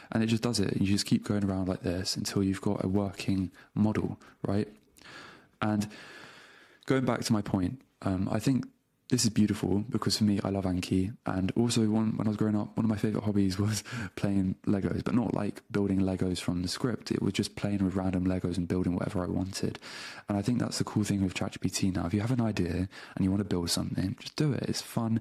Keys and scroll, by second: 1.5 super+Tab, 3.7 shift+super+Up, 4.0 super+BackSpace, 4.6 super+v.